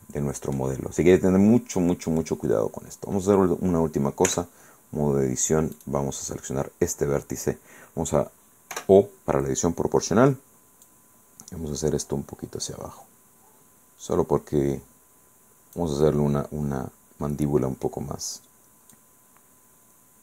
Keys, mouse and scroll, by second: 1.0-1.4 scroll up 1, 4.4 Tab, 5.9 right click, 8.8 o, 11.0 click, 11.6-12.0 scroll up 1, 13.8 scroll down 1, 16.2-18.2 middle drag, 19.0 click, 20.0 scroll down 1.